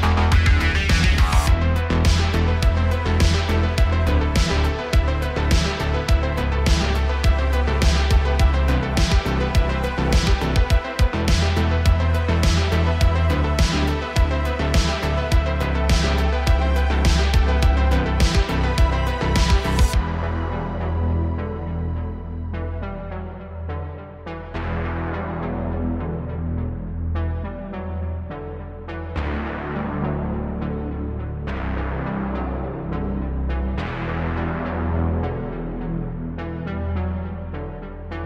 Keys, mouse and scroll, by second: 0.7-3.7 drag, 3.9-4.3 middle drag, 7.7-12.9 drag, 12.9 middle click, 13.4 scroll up 3, 14.5-17.3 drag, 17.7-19.5 middle drag, 19.5-21.8 drag, 22.0 click, 22.8-23.2 scroll down 8, 23.2 click, 23.5-24.3 middle drag, 24.3 click, 25.8-26.3 drag, 26.4-27.6 drag, 27.6-28.0 shift+middle drag, 28.0 scroll down 2, 28.2-29.3 middle drag, 29.3 click, 30.1 Tab, 30.3 scroll up 2, 31.6 click, 32.3 click, 32.9 click, 33.2 1, 33.5-35.3 drag, 36.0 ctrl+KP_Add, 36.2 ctrl+KP_Add, 36.8 shift+d, 38.0-38.2 middle drag.